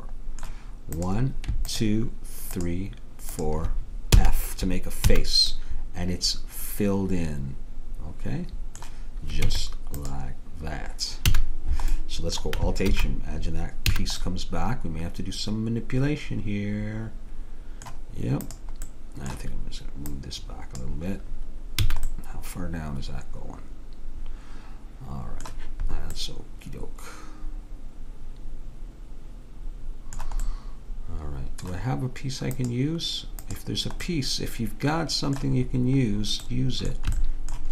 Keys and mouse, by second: 1.0-5.1 drag, 4.2 f, 5.1 a, 9.5 Tab, 11.4 a, 12.9 alt+h, 14.0 a, 18.5-21.9 drag, 21.9 a, 26.3-27.9 middle drag, 30.5 middle click, 32.6-35.3 drag, 34.1-35.7 middle drag, 35.8 middle click, 37.2 middle click, 37.4-37.7 middle drag.